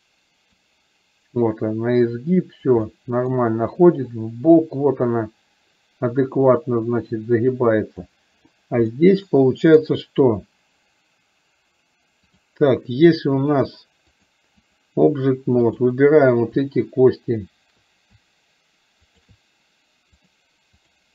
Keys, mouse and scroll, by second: 0.7-2.7 drag, 2.9 middle click, 4.2-8.1 drag, 9.0-10.0 middle drag, 14.4-14.9 drag, 15.7 click, 19.2 shift+click, 20.2 click.